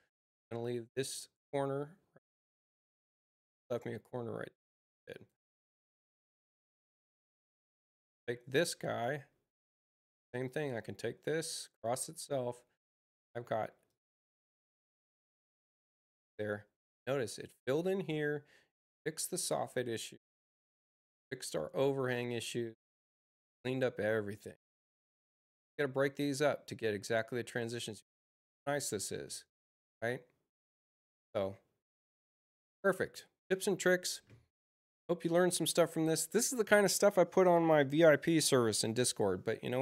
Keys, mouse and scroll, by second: 0.8 click, 2.4 Return, 3.5 click, 5.0 click, 7.9 click, 10.4-11.9 drag, 13.8 click, 35.4 click.